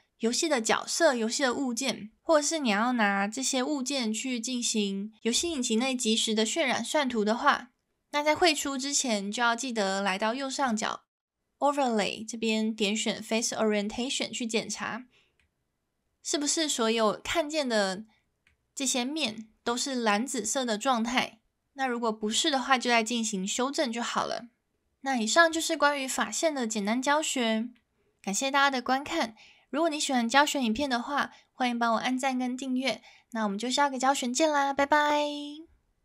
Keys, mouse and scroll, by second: 10.6-13.6 drag, 13.9-15.4 middle drag, 16.4-18.5 middle drag, 27.7-28.1 middle drag.